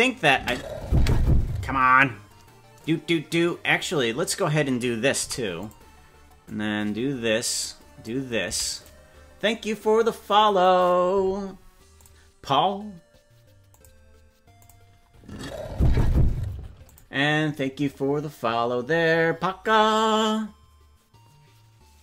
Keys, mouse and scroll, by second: 0.3 space, 0.9 space, 2.8-4.3 drag, 5.1 i, 6.5-8.1 drag, 8.4 i.